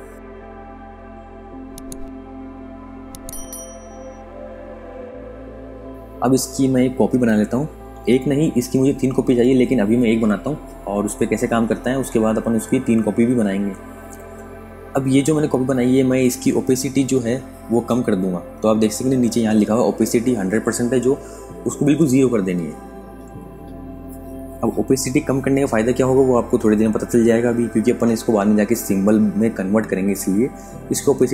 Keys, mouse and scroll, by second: 0.1 click, 5.0 click, 6.2 alt+click, 11.5 space, 11.6 click, 16.9 super+Num_Lock, 19.5 super+KP_Add, 24.3 super+KP_Subtract, 31.2 click.